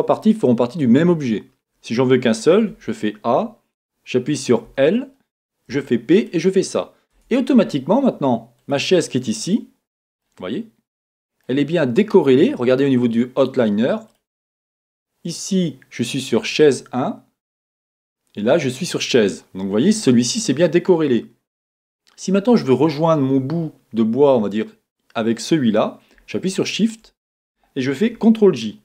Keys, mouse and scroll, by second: 2.7 a, 4.7 l, 5.7 p, 7.2 Tab, 7.6 scroll down 2, 7.7 middle click, 8.6 click, 9.4 click, 10.2-11.5 middle drag, 11.5-14.1 scroll up 2, 14.1 click, 17.8 click, 22.5 click.